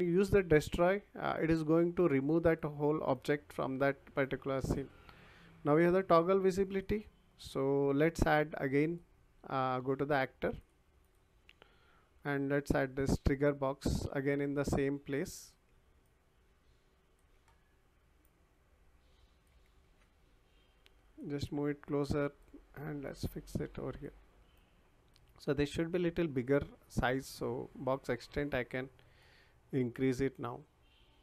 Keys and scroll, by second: 19.8 ctrl+z.